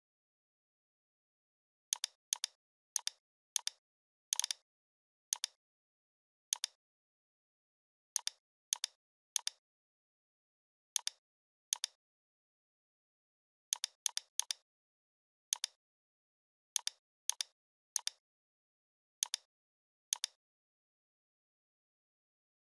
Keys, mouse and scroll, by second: 9.9-10.2 scroll down 1, 11.0-13.0 drag, 14.7 right click, 15.5-21.6 drag.